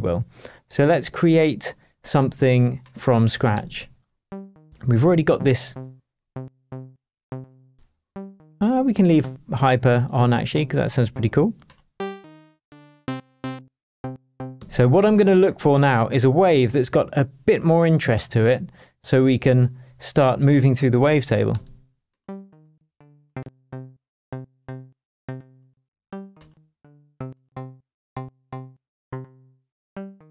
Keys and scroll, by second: 3.5 space.